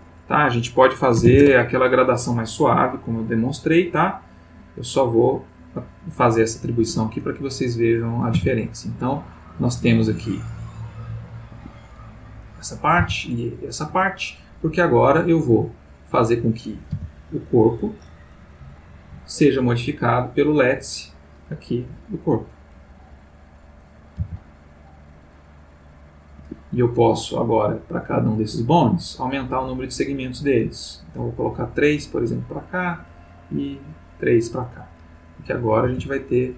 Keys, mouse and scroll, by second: 1.1 ., 1.2 5, 1.4 Return, 3.1 click, 4.1 click, 5.5 click, 6.8 Tab, 7.8 click, 8.3 r, 11.5 Escape, 12.2 click, 13.0 r, 13.9 Escape, 15.0 click, 16.2 click, 16.9 g, 17.7 Escape, 18.8 click, 19.4 click, 20.0 click, 21.1 click, 22.1 click, 23.5 click, 24.1 r, 26.4 Escape, 28.1 click, 29.7 click, 30.4 click, 32.0 click, 33.3 click, 35.3 click, 35.8 r.